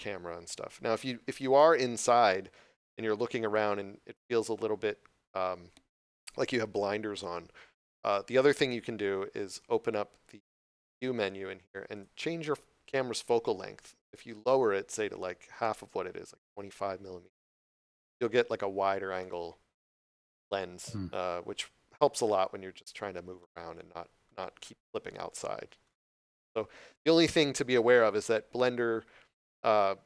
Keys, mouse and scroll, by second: 1.5 shift+middle click, 11.8 click, 17.6 Return, 19.1 middle click, 24.2 scroll down 1, 25.2 scroll up 1.